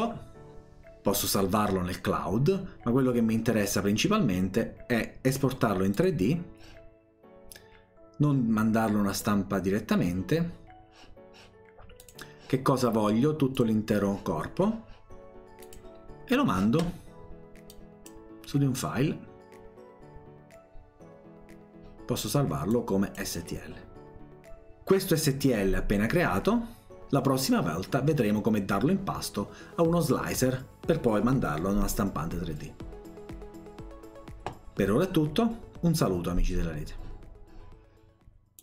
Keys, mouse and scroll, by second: 5.3 click, 5.9 click, 12.0 click, 13.6 click, 15.6 click, 17.7 click, 22.7 click.